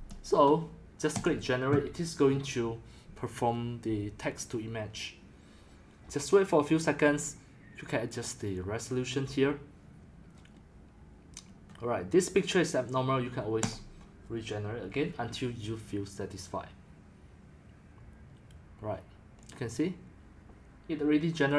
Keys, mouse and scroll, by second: 0.0-0.1 typing, 5.6 click, 7.2 scroll, 8.1-8.7 scroll, 11.4 scroll, 13.7 click, 17.5-18.7 drag, 19.5-21.5 drag.